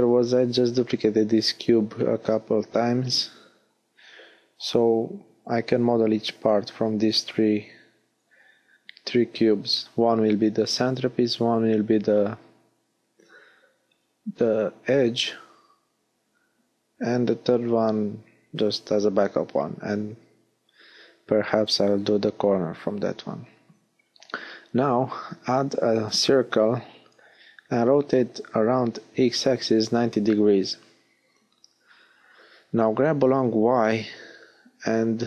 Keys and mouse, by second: 17.9 a, 19.5 shift+a, 23.1 r, 30.0-31.7 middle drag, 30.0 g, 33.6-35.2 drag.